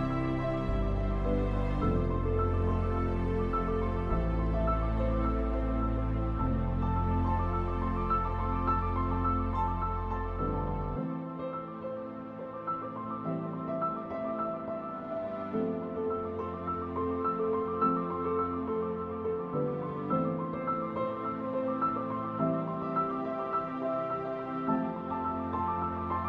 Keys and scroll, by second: 0.4 ctrl+z, 1.3 space, 1.5 ctrl+-, 4.9 space, 6.2 v, 6.8 ctrl+z, 9.6 Delete, 9.9 ctrl+z, 10.5 Delete, 10.7 ctrl+d, 11.1 Delete, 11.3 ctrl+d, 12.2 ctrl+d, 12.6 Delete, 13.1 ctrl+z, 13.3 Delete, 13.5 ctrl+d, 13.6 space, 15.2 v, 16.2 ctrl+z, 17.0 ctrl+t, 17.2 Escape, 18.5-20.9 typing, 19.4 ctrl+t, 21.9 Delete, 22.7 Delete, 22.9 ctrl+d, 23.0 space, 24.2 ctrl+d, 25.4 v.